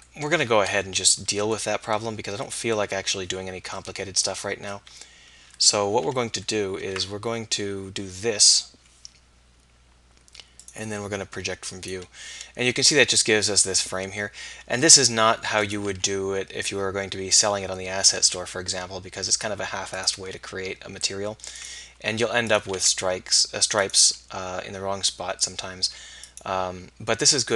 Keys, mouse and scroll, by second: 0.9-2.7 typing, 4.9 KP_3, 5.6 KP_1, 7.0 KP_4, 14.8 s, 15.9 g, 18.2 g, 20.1 s, 22.0 g, 22.8 s, 24.0 g.